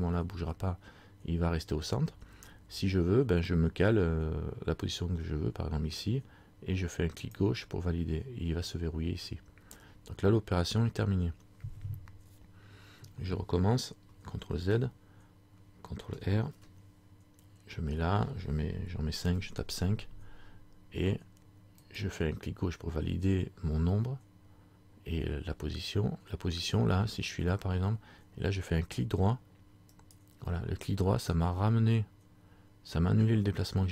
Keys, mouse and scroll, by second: 14.7 ctrl+z, 16.5 ctrl+r.